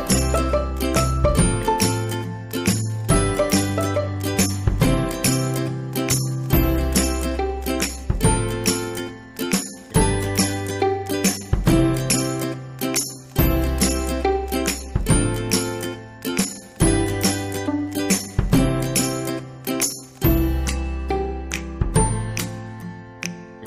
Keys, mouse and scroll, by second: 2.7 scroll up 1, 3.9-7.2 drag, 19.0 click, 21.6 click.